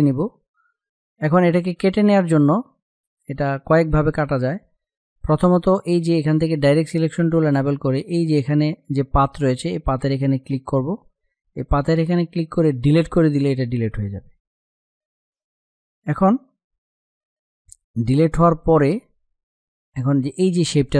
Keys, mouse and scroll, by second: 6.3 click, 12.5 Delete.